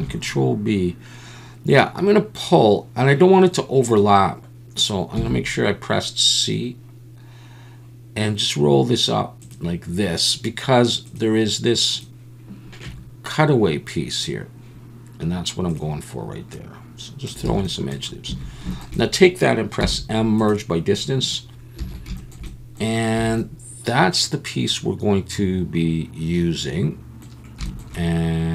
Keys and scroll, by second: 5.2 c, 17.6 alt+a, 18.3 a, 19.8 m, 21.8 alt+a, 23.2 a.